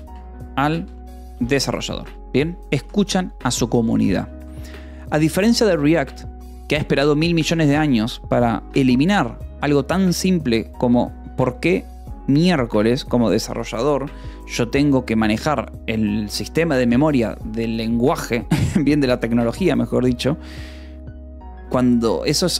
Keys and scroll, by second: 0.0-2.5 typing, 3.4 ctrl+s, 4.8 ctrl+s.